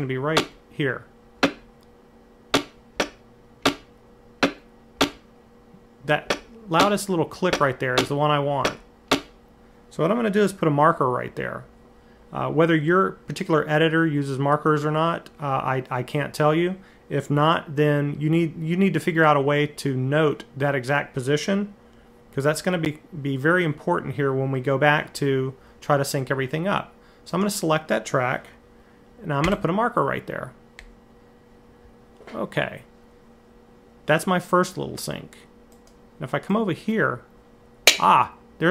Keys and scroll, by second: 0.1 Right, 1.2 Right, 2.3 Left, 2.8 Left, 3.4 Right, 4.2 Right, 4.8 Left, 6.1 Left, 6.6 Right, 7.3 Left, 7.8 Right, 8.4 Left, 8.9 Right, 29.2 m.